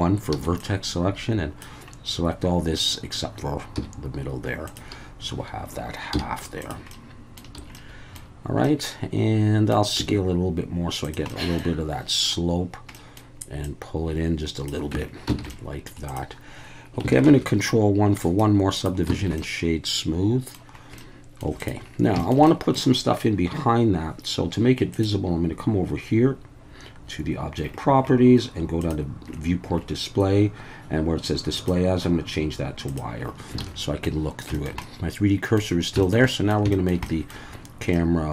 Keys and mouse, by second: 0.4 b, 3.8 x, 6.1 z, 6.9 middle click, 7.6 a, 7.7-8.2 middle drag, 8.6-9.7 middle drag, 10.0 s, 11.0 click, 11.3-11.6 middle drag, 12.9 middle click, 13.6-14.7 drag, 14.9 Tab, 15.4 alt+a, 15.5-15.9 middle drag, 16.1 click, 17.3 ctrl+1, 18.2 click, 19.2 alt+a, 19.4-20.5 middle drag, 21.0-21.4 middle drag, 21.6 click, 22.2 shift+middle drag, 22.5 middle click, 24.9 click, 28.8 drag, 31.6-33.0 drag, 33.6 alt+a, 33.8 middle drag, 34.5 shift+middle click, 34.8-35.6 middle drag, 36.0 shift+middle drag, 36.3 middle click, 36.7 shift+middle drag, 37.1 middle click, 37.9-38.3 middle drag.